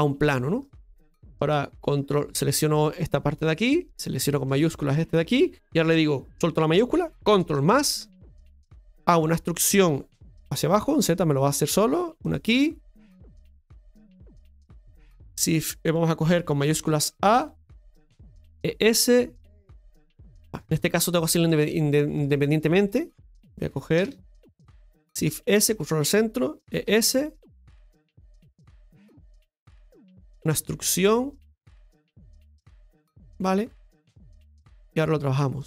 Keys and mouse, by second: 0.7-2.8 middle drag, 3.7 right click, 4.9 shift+right click, 7.6 ctrl+KP_Add, 8.9-17.4 middle drag, 10.6 e, 21.4 middle click, 22.8 right click, 23.9 ctrl+KP_Add, 26.7 e, 29.0-30.2 middle drag, 31.8 e, 33.3 middle click, 34.4-35.4 shift+middle drag, 35.4 right click.